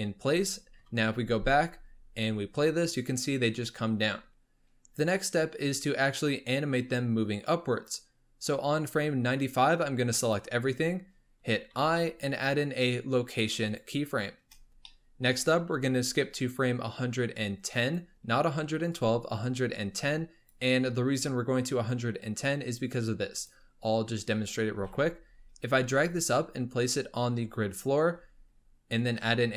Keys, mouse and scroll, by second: 0.7 KP_1, 2.1-5.2 drag, 9.7 click, 14.8-16.4 shift+middle drag, 16.4-22.0 drag, 22.7-23.9 drag, 23.9-24.4 scroll down 4, 24.4-24.8 scroll up 4, 24.8 g.